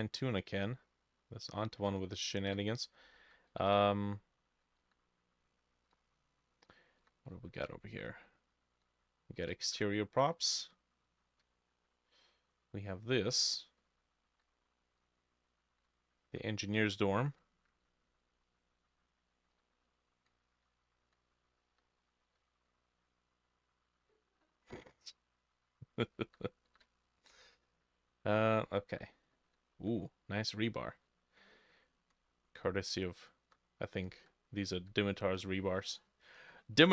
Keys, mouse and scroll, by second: 0.0-36.9 drag, 0.0 w, 0.2-0.8 scroll up 6, 0.5-2.0 w, 0.8 w, 2.3 w, 3.6 w, 3.6 s, 3.7 d, 4.8 w, 6.0-16.8 typing, 6.4 scroll up 1, 7.0 scroll, 14.9 scroll down 1, 17.9-22.5 typing, 22.2-22.5 scroll up 1, 24.7-27.3 typing, 28.7 w, 29.4 w, 31.1-33.5 w, 34.1 d, 34.8 d, 35.2 a.